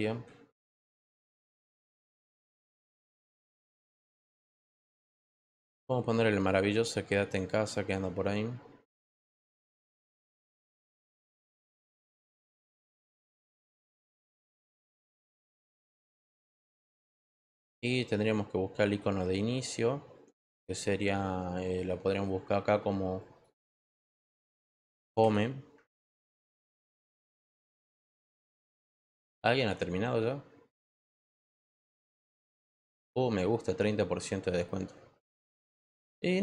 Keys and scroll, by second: 1.2 Return, 24.4-25.7 typing.